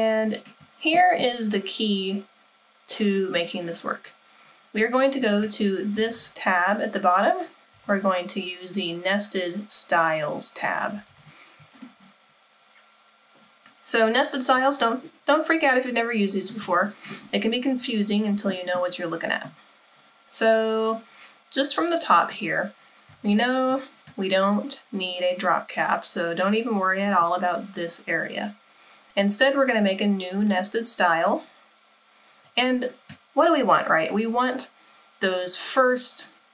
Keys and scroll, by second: 6.1 super+=, 8.0 super+=, 11.3 super+=, 11.3 super+-.